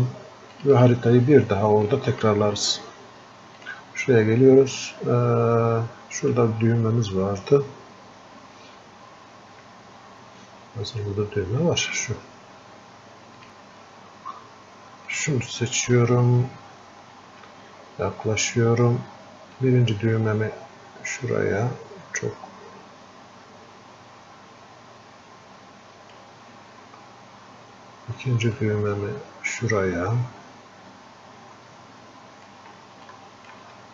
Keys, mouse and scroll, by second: 10.1-33.9 drag.